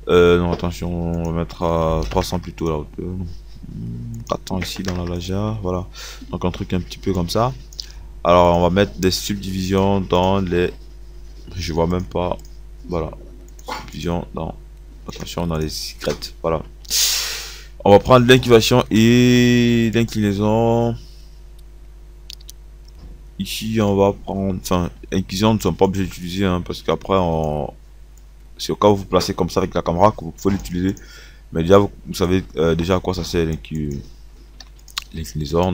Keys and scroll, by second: 2.1 KP_3, 4.8 KP_4, 5.0 KP_0, 10.5 KP_0, 14.4 KP_0, 26.0 Delete, 34.8 KP_4.